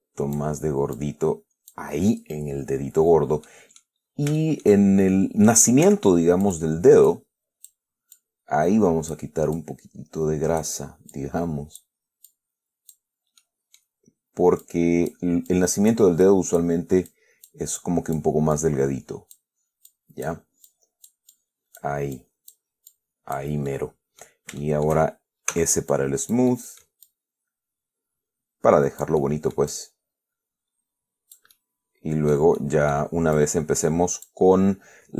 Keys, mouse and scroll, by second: 1.2 click, 3.8 middle click, 4.3-4.6 scroll up 2, 4.6-5.1 shift+middle drag, 6.1 f, 6.7 click, 7.4 click, 8.4-9.6 drag, 9.8-11.1 drag, 11.4 click, 12.6 click, 13.7-14.3 middle drag, 14.9 click, 15.8 click, 16.5 click, 17.4 click, 18.1 click, 18.8-19.8 drag, 20.2 click, 21.0-22.3 drag, 22.4 click, 23.2 click, 24.0-24.7 middle drag, 24.9-25.3 shift+middle drag, 25.8 s, 26.2 click, 26.8-27.3 middle drag, 29.5-32.2 drag, 32.2 scroll down 1, 32.9-33.4 middle drag, 33.6-34.7 drag.